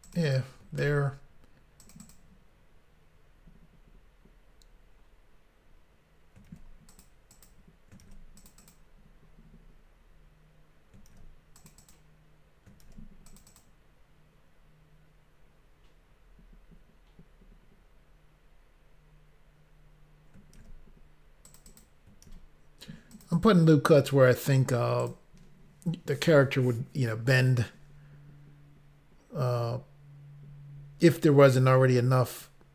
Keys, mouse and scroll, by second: 0.0 click, 0.2 click, 0.2 click, 0.8 ctrl+r, 2.0 double click, 2.1 ctrl+r, 2.1 double click, 6.5 ctrl+r, 6.9 click, 7.1 click, 7.4 click, 7.5 double click, 8.1 ctrl+r, 8.4 double click, 8.5 double click, 8.6 double click, 8.7 double click, 11.1 ctrl+r, 11.6 click, 11.8 click, 12.9 ctrl+r, 13.3 double click, 20.6 ctrl+r, 21.5 click, 21.6 click, 21.7 click, 21.8 double click, 22.3 ctrl+r, 23.2 double click, 23.3 double click, 23.5 double click, 25.0 click, 25.1 click.